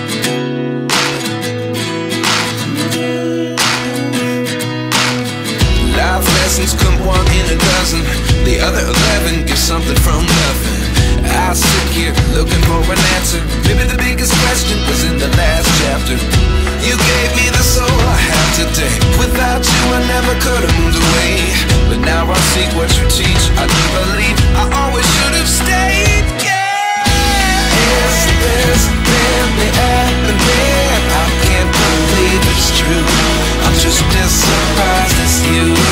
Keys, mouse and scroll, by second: 15.9-17.1 scroll up 1, 20.3 right click, 30.2-31.3 typing, 32.3-32.7 typing, 34.1-34.7 typing.